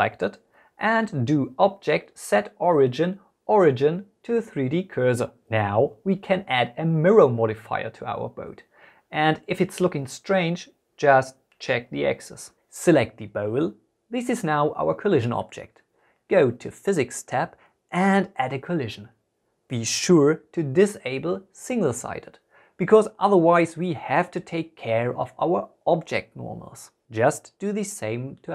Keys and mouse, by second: 0.0-3.2 drag, 6.4-8.0 drag, 10.9 click, 11.3-11.6 drag, 11.8 Tab, 11.9 a, 12.6 click, 13.3 Tab, 13.8 click, 14.2 middle click, 15.4 click, 17.5 click, 19.1 click, 23.7 click.